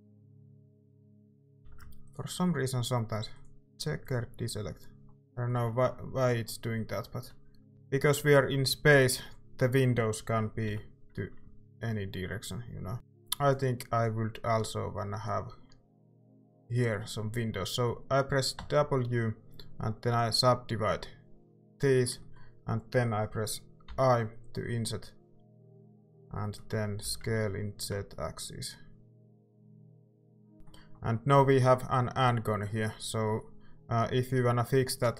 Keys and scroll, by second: 1.6 a, 7.7 i, 10.7 i, 12.9 ctrl+s, 12.9 Tab, 12.9 typing, 18.6 w, 23.9 i, 26.8-27.7 typing, 30.3-31.4 typing.